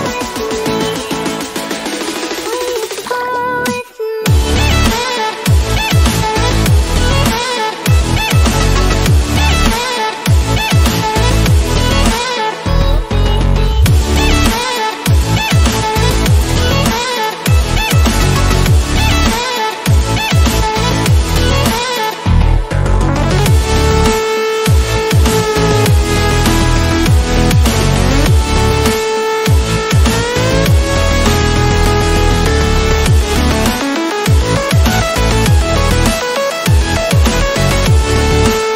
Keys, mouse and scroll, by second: 8.5-9.0 scroll down 1, 9.0-9.7 typing, 10.1 click, 12.5 alt+click, 13.3 scroll up 1, 13.6 alt+scroll down 1, 14.6 scroll down 1, 15.0-15.5 scroll up 1, 15.6 alt+scroll up 1, 16.3 scroll down 1, 16.9-20.7 alt+drag, 22.0 alt+click, 23.6-24.7 alt+drag, 24.7 scroll down 1, 26.6-28.1 alt+drag, 28.1 alt+scroll down 1, 28.9 alt+scroll up 1, 29.9-30.2 scroll down 1, 30.6-31.0 scroll up 1, 31.0 alt+click, 36.2 click.